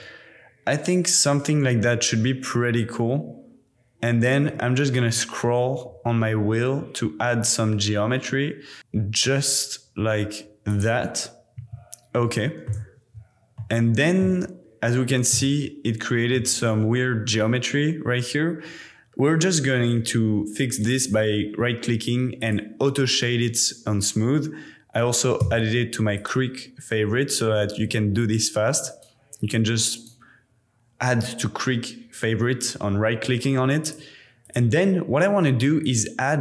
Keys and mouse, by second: 11.6 Tab, 12.1-12.7 middle drag, 13.0 alt+z, 13.5-14.4 middle drag, 15.4-16.4 shift+middle drag, 20.9-22.5 drag, 25.4 q, 28.9-33.7 drag, 34.4 click, 35.8 click.